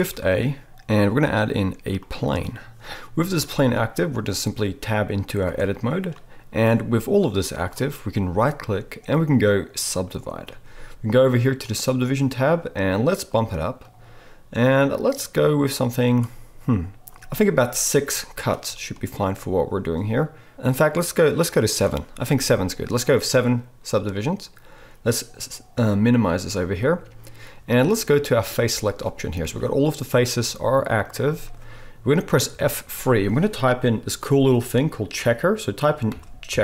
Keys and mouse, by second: 0.0 shift+a, 5.5 Tab, 8.5-11.3 middle drag, 8.5-11.6 right drag, 11.7-13.2 drag, 11.7 middle click, 11.7 right click, 17.2-20.3 drag, 24.0-26.4 drag, 24.0-36.6 middle drag, 24.0-26.4 right drag, 32.5 F3.